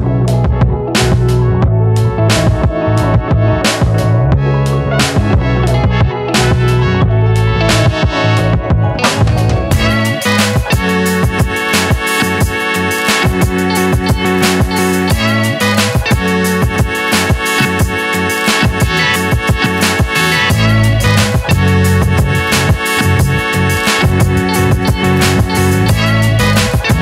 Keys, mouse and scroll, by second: 0.9 s, 2.8 shift+middle click, 3.6 click, 4.2 middle click, 4.9 click, 6.2 click, 6.7 scroll up 2, 7.3 g, 10.1 middle click, 10.5-11.6 scroll up 1, 11.6 ctrl+shift+b, 15.9-17.0 drag, 17.0 ctrl+b, 20.7-22.7 middle drag, 23.4 a, 24.7 click, 25.9 s.